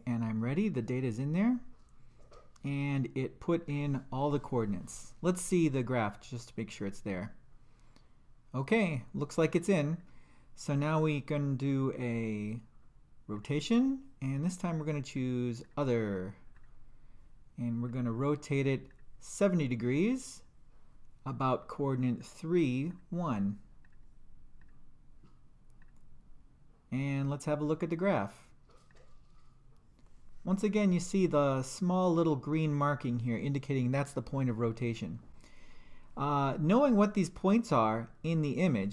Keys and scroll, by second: 6.7 2, 9.9 Return, 11.7 Down, 13.4 Return, 14.8 Down, 16.6 Return, 17.9 7, 18.9 0, 19.9 Return, 22.2 3, 22.9 Return, 23.8 1, 24.6 Return, 28.9 2.